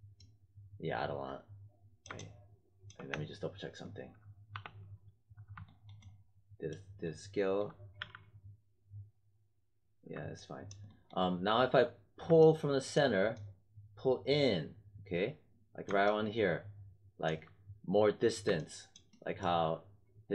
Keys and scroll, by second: 3.0 space, 4.5 4, 7.9 z.